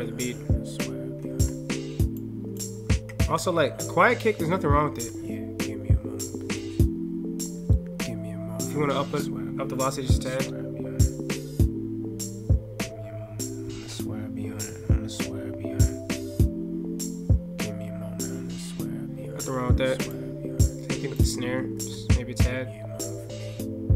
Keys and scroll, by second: 1.2 ctrl+F8, 4.9 alt+F8, 21.5 ctrl+F8, 21.8 ctrl+?, 22.1 alt+F8.